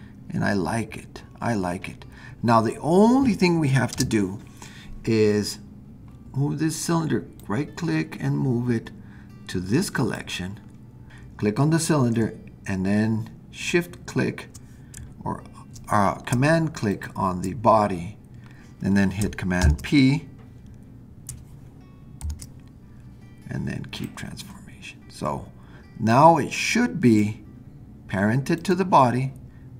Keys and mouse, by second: 3.9 space, 7.5-10.2 drag, 16.9 super+click, 19.6 super+p, 22.2 super+p, 26.1-27.3 drag, 28.6 click.